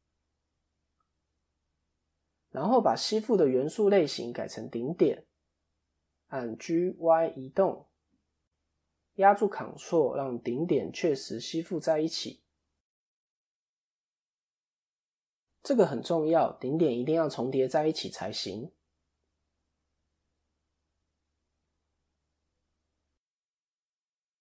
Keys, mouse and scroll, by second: 1.2 scroll up 1, 2.4 click, 4.6 shift+middle click, 5.6 scroll up 2, 7.1 g, 15.3 scroll up 1, 15.8 shift+middle click, 16.1-17.1 shift+scroll up 3, 17.1 g, 23.6 scroll down 2.